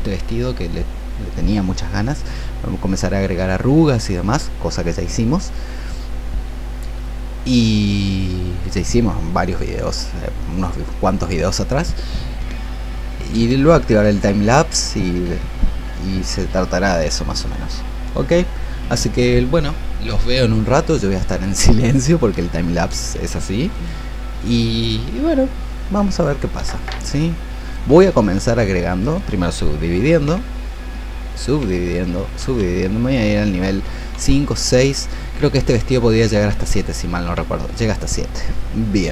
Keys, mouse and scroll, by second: 23.7 alt+click, 26.9-29.6 drag, 36.7 d.